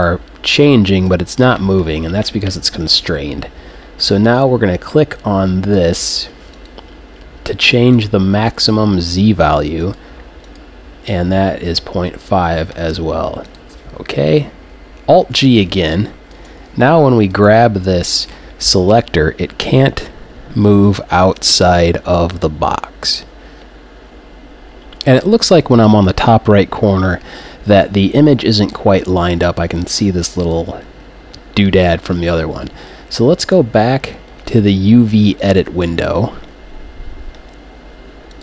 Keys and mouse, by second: 6.5-12.3 drag, 13.5-15.6 drag, 15.2 alt+g, 18.2 g, 18.7 right click, 24.1-25.8 right drag, 33.4-35.2 right drag, 35.4-37.1 drag.